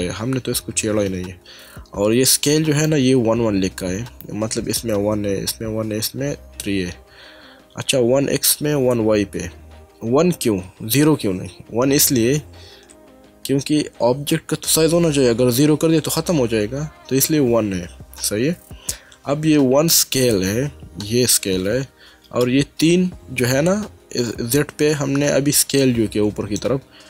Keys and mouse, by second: 25.8 middle click.